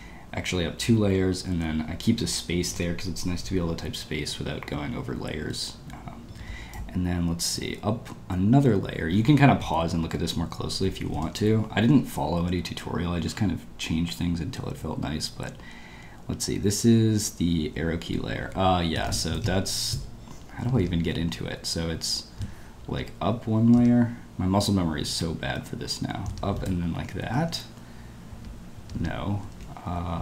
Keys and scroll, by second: 6.2 ctrl+d, 6.7-7.5 typing, 9.6 typing, 18.8-19.9 typing, 20.8 Escape, 22.9 Escape, 23.8 Escape, 26.3 Escape, 26.5 space, 28.8 Escape, 29.5 ctrl+u.